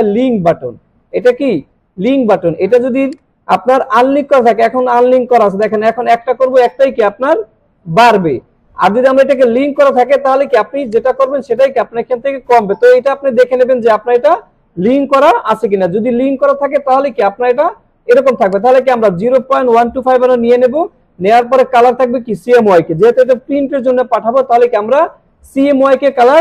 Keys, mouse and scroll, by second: 3.0 click, 5.6 click, 9.3 click, 10.9 click, 18.4 click, 20.6 scroll down 1.